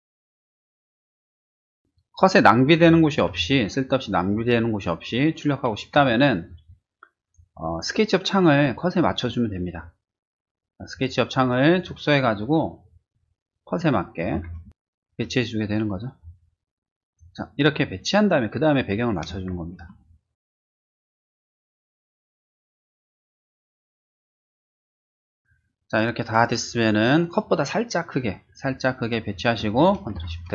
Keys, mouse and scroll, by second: 1.7 click, 3.3 ctrl+t, 5.9 Escape, 7.2 click, 10.8 click, 12.1 click, 13.1 click, 14.7 ctrl+shift+z, 15.6 right click, 17.3-19.6 drag, 20.8 click, 21.7 shift+middle click, 22.4 shift+click, 23.2 click, 23.9 shift+click, 30.1 ctrl+shift+z.